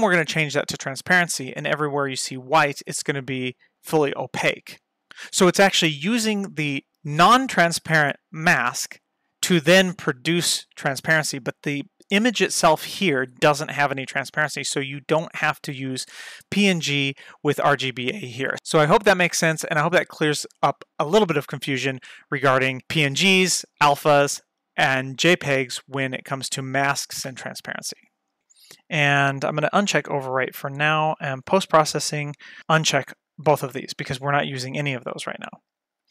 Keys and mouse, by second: 29.9 click, 31.4 click, 33.4 click, 33.8 click, 35.8 click.